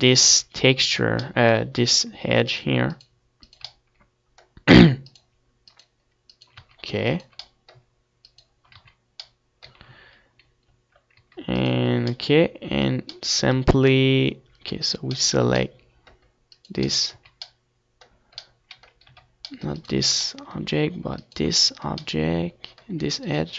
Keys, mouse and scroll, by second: 0.1 z, 1.5 z, 3.4 middle click, 6.3 z, 8.5 z, 9.3 right click, 9.3 z, 9.6-10.9 middle drag, 10.4 shift+z, 10.9 z, 11.2 right click, 11.5 z, 11.9-12.9 right drag, 12.2-13.5 middle drag, 13.8-17.6 middle drag, 16.2-17.2 right drag, 16.7 z, 17.4 right click, 17.5 right click, 17.8-20.0 middle drag, 18.6 c, 20.0-22.5 drag, 22.9-23.5 right drag.